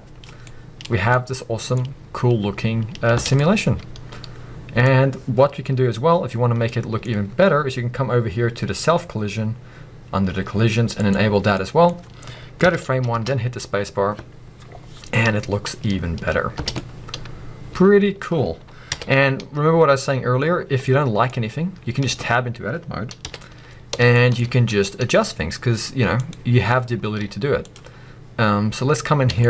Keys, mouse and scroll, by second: 0.6-6.7 middle drag, 3.2 space, 4.9-6.4 scroll up 2, 6.4 scroll down 2, 7.2 scroll up 1, 7.9-11.0 scroll down 1, 11.0 click, 11.5 middle click, 12.6 shift+Left, 13.1 space, 16.7-17.0 scroll down 1, 17.0 middle click, 18.8 KP_1, 20.5-20.8 scroll up 1, 20.8 middle click, 22.1 b, 23.2 KP_1, 24.1 shift+scroll up 1, 24.2 shift+middle click, 26.3 click, 27.0 scroll up 1, 27.9-29.1 scroll up 1, 29.4 shift+middle click.